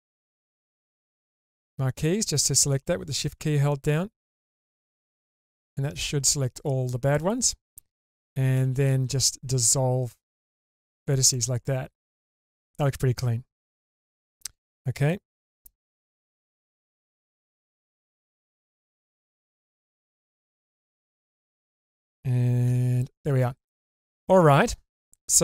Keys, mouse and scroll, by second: 0.6 shift+click, 2.3 shift+click, 3.7-4.8 shift+drag, 5.3 scroll down 1, 5.5-7.7 middle drag, 8.5 x, 11.3-13.9 middle drag, 17.7 alt+z, 18.3-20.9 middle drag, 21.5 shift+middle click, 22.7 /, 23.5-25.4 scroll down 2, 23.9-25.4 middle drag.